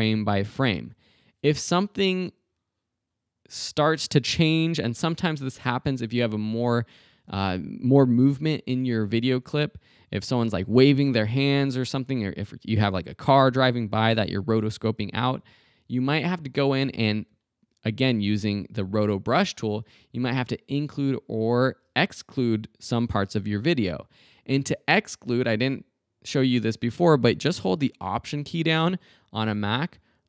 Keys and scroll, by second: 0.6 super+Right, 15.7 super+Right.